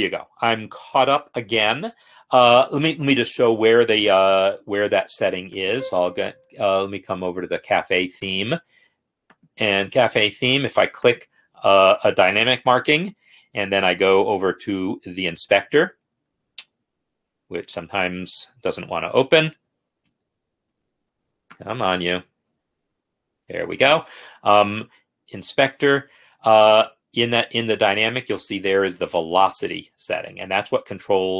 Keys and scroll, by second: 15.6 F8, 23.4 F8.